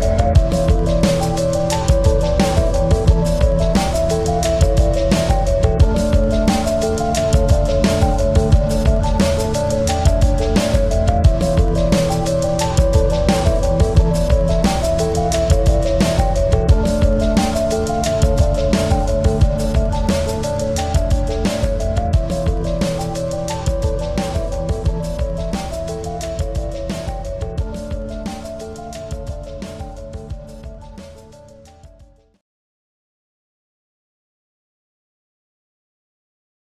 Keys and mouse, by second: 1.6 click, 2.8 click, 3.8 ctrl+z, 4.6 click, 4.7 click, 4.7 typing, 6.5-7.9 drag, 6.5 typing, 8.4 space, 8.5 click, 8.9 space, 9.1 space, 10.6 click, 11.9-14.2 drag, 11.9 typing, 15.8 click, 15.8 typing, 17.2-19.0 drag, 17.2 typing, 19.5 click, 19.5 typing, 19.6 ctrl+-, 20.7 space, 22.7 click, 23.0-24.0 typing, 25.1 ctrl+=, 25.6-26.3 typing, 25.7 click, 26.1 click, 27.4 click, 27.5-28.1 typing, 29.8-30.3 typing, 30.0 click.